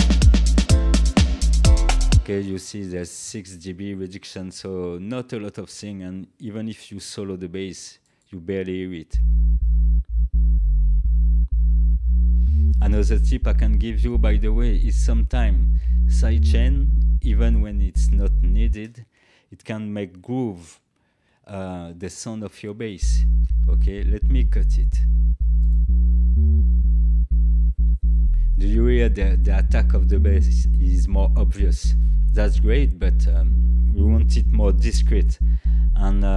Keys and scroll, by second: 2.0 space, 9.0 space, 18.6 space, 21.1 ctrl+l, 22.9 space.